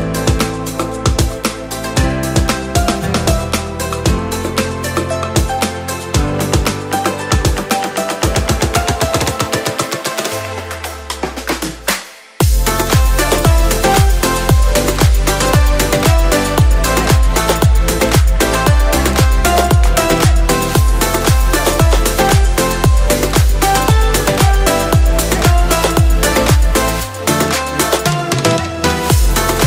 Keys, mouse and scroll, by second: 0.2 click, 1.0-3.7 middle drag, 4.4 s, 6.3 click, 6.9-7.9 drag, 8.3 middle click, 9.4 2, 10.1 click, 10.4 alt+click, 11.6 s, 12.7 click, 13.1-14.2 middle drag, 14.3 click, 15.8-18.8 middle drag, 16.1 typing, 20.7 KP_7, 21.9 r, 23.3 click, 23.9 g, 26.3 click, 26.7-28.1 middle drag, 28.4 Tab, 28.8 click, 29.0 scroll down 1, 29.4-29.6 middle drag.